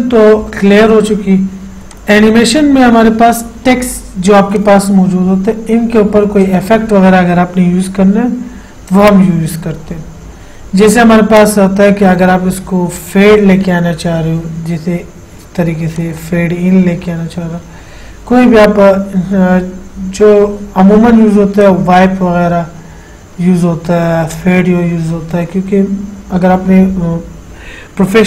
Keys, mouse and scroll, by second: 2.1 click, 2.1 click, 4.8 click, 13.2 click, 16.2 click, 21.9 click, 24.6 click.